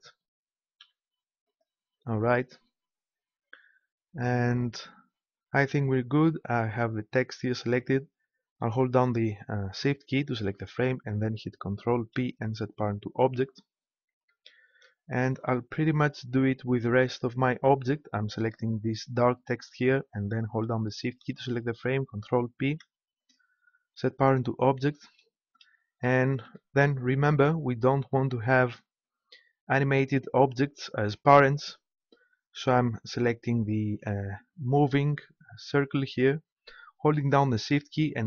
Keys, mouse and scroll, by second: 10.4-12.0 right drag, 12.0 ctrl+p, 18.6-22.6 right drag, 22.6 ctrl+p, 33.9-38.2 right drag.